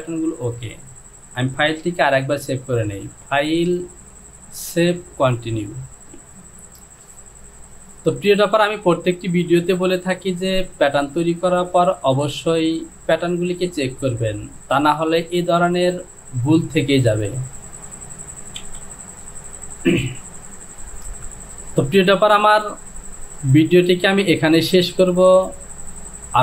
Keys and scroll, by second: 18.8 j.